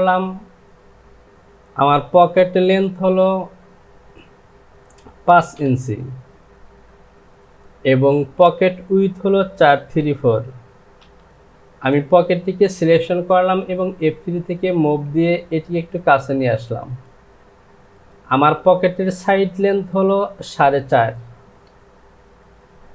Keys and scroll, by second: 6.9 Down, 10.2 KP_4, 11.0 KP_Decimal.